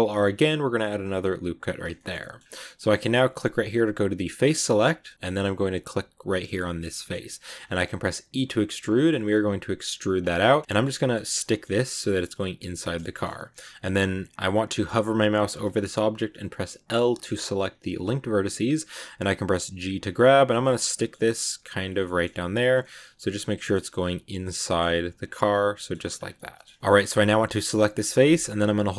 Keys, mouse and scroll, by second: 1.9 shift+middle click, 2.3-3.5 scroll up 1, 3.5 click, 5.7 right click, 5.9 scroll down 1, 6.1 middle click, 7.0-7.7 scroll up 1, 8.3 e, 10.1 scroll down 1, 10.2 middle click, 11.0 scroll up 2, 11.3 middle click, 11.9 g, 12.7-14.2 shift+middle drag, 14.2 scroll down 2, 16.0-16.8 scroll up 2, 16.8 l, 17.2-19.5 middle drag, 19.5 g, 20.5 middle click, 21.1 g, 21.9 middle click, 22.2 g, 22.7 middle click, 23.7 scroll up 1, 23.7 g, 24.3 middle click, 24.8 g, 25.3 scroll up 1, 25.3 scroll down 1, 25.4 middle click, 26.0 scroll down 1, 26.2 middle click, 26.7 Tab, 26.7 scroll down 2, 26.8 middle click, 26.8-27.4 scroll up 3, 27.6 right click, 27.9 scroll up 1, 28.5-28.9 scroll up 2.